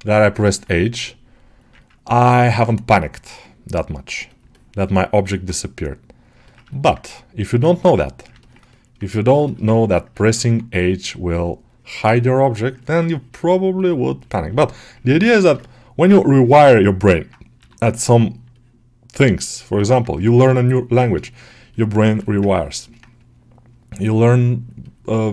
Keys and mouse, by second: 0.3 middle click, 1.7 ctrl+middle click, 1.9 alt+middle click, 3.2-4.4 right drag, 4.4 middle click, 4.8 ctrl+alt+middle click, 5.1 alt+middle click, 5.4 middle click, 6.6 alt+shift+middle click, 8.3 ctrl+alt+middle click, 8.6 alt+shift+middle click, 9.3 shift+middle click, 9.6 ctrl+alt+middle click, 10.0-11.2 alt+middle drag, 11.2-12.7 ctrl+drag, 12.7 middle click, 13.0-14.4 drag, 14.4-15.5 alt+middle drag, 16.1 alt+middle click, 16.7 middle click, 17.4 g, 17.8 ctrl+middle click, 19.6 middle click, 20.0-21.9 drag, 21.9 shift+middle click, 22.1 alt+middle click, 22.4 ctrl+alt+middle click, 22.7-25.3 middle drag.